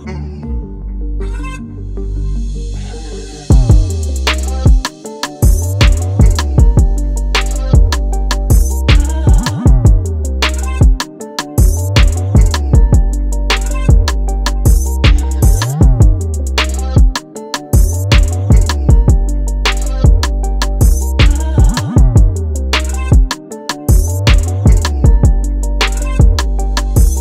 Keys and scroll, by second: 18.0 Return, 20.8 super+t, 24.6 Return, 27.1 super+s.